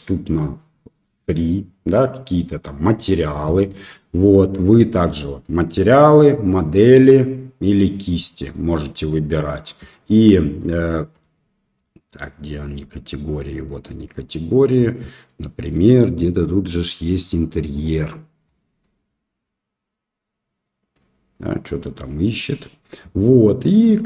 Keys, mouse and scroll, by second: 6.0-7.8 drag, 11.1 click, 13.6 click, 17.7 click.